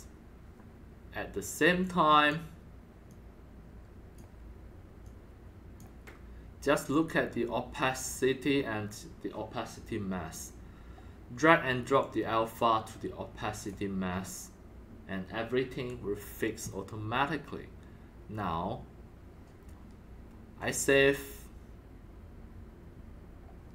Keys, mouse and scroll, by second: 1.8-2.2 drag, 3.0-4.1 drag, 5.0 click, 8.6-10.9 drag, 12.0-13.6 drag, 14.9-16.7 drag, 20.6 click, 23.5-23.7 drag.